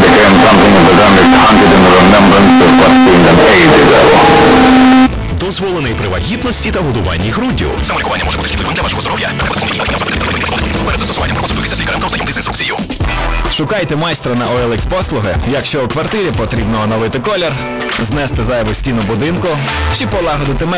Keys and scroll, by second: 5.1 Page_Down.